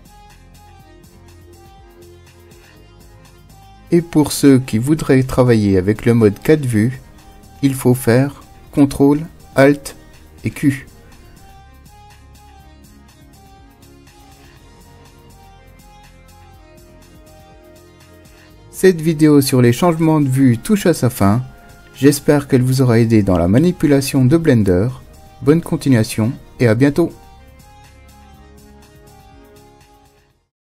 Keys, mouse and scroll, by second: 7.2 ctrl+alt+q.